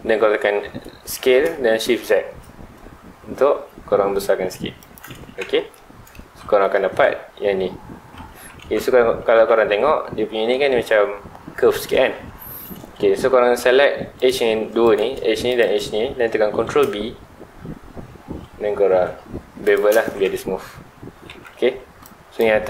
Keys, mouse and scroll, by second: 4.9 shift+click, 5.1 alt+a, 5.4 Tab, 5.7-6.2 middle drag, 6.2 alt+a, 6.5-6.9 middle drag, 8.2 middle click, 8.3 Tab, 12.0 Tab, 12.3 middle click, 12.9-13.2 scroll up 2, 13.2 2, 13.3-14.1 scroll down 2, 14.1 alt+click, 14.8 alt+click, 15.5 alt+shift+click, 16.5 ctrl+b, 19.7 shift+click, 20.0 alt+a, 20.2 Tab, 20.5-21.4 scroll down 2, 20.7 middle click.